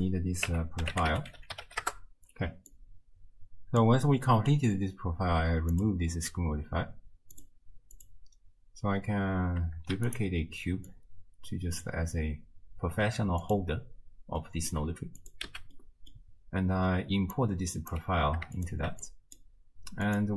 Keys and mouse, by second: 0.0-1.9 drag, 2.9 click, 5.8 click, 7.4 click, 8.0 click, 10.0 shift+d, 10.9 drag, 13.5 click, 14.4 click, 15.2 click, 15.5 x, 15.9 click, 17.4 click, 18.6 alt+shift+click, 19.2 click, 20.1 click.